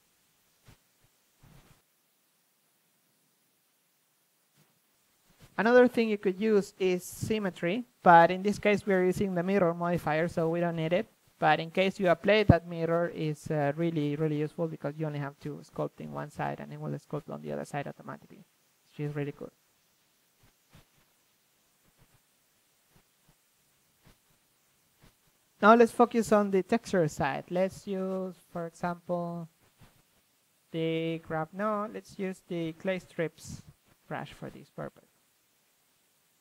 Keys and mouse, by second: 3.9 KP_1, 4.7-6.0 middle drag, 6.0 shift+space, 7.2-8.0 drag, 8.0 middle click, 8.2 click, 9.5-10.4 drag, 10.4 a, 10.8 a, 12.3-13.8 drag, 15.4-16.5 drag, 17.3-18.5 drag, 18.7-21.7 drag, 21.7-23.0 middle drag, 21.7 g, 23.0 f, 23.7-25.4 drag, 27.8-28.6 middle drag, 28.2 f, 28.6-32.0 drag, 32.0-33.6 middle drag, 32.2 KP_1, 33.6 f, 33.9-34.9 drag.